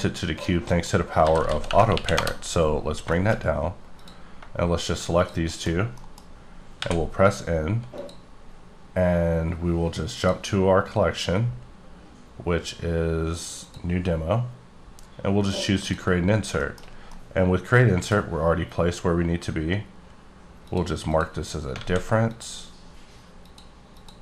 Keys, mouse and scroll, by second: 0.4 right click, 0.7 middle click, 1.2 g, 1.5 z, 1.6 KP_Subtract, 1.8 KP_1, 2.2 KP_Enter, 2.7-3.5 scroll up 8, 3.1 shift+middle click, 4.0 click, 5.5 middle click, 5.7 shift+scroll down 2, 5.9 middle click, 6.7 n, 7.9 click, 10.1 click, 15.8 click, 16.6 shift+middle click, 16.8 shift+scroll down 2, 17.2 middle click, 18.2 scroll up 1, 20.7 click, 21.1 click, 22.0 a, 22.3 click, 23.4 click, 23.9 click.